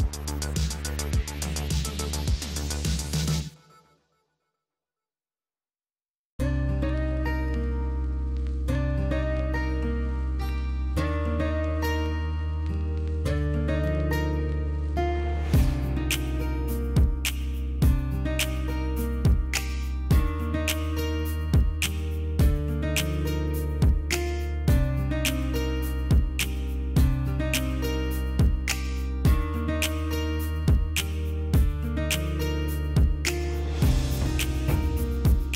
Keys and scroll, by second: 5.5 space, 6.0 space, 10.0 space, 10.4 space.